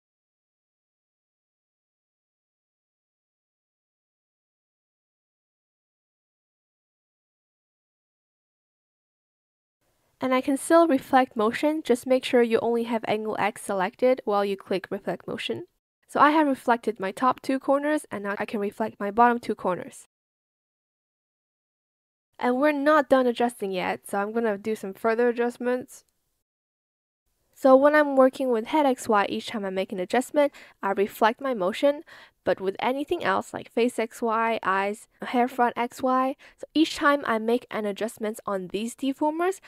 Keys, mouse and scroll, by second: 0.2 shift+click, 1.3 shift+click, 2.2 ctrl+z, 5.3 ctrl+z, 7.5 shift+click, 7.8 ctrl+z, 8.0 ctrl+z, 10.2 ctrl+z, 24.0 ctrl+shift+z, 24.6 shift+click, 25.1 shift+click, 25.7 shift+click, 28.6 shift+click, 29.0 ctrl+z, 29.6 space, 29.6 click, 30.3 ctrl+z, 33.0 ctrl+z, 34.4 shift+click, 34.7 ctrl+z, 38.8 shift+click, 39.5 shift+click.